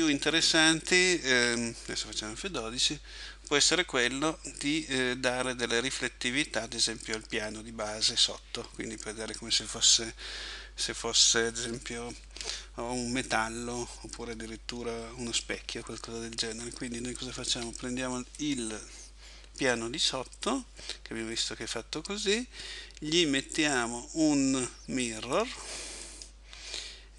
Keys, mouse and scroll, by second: 17.6 Escape, 18.4 right click, 21.7 click, 25.4 click.